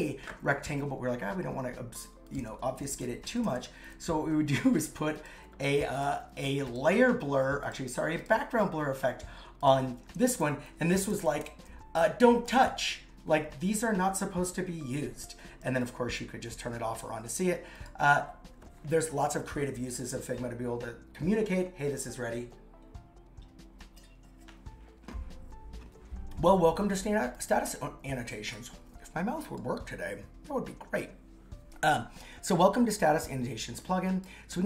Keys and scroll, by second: 3.1 shift+Down, 10.7 shift+Up, 16.6 super+x.